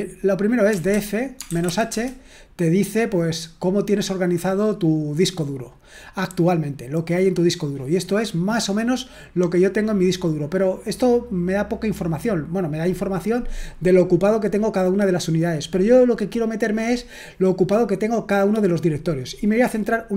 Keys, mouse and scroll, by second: 0.4-2.1 typing.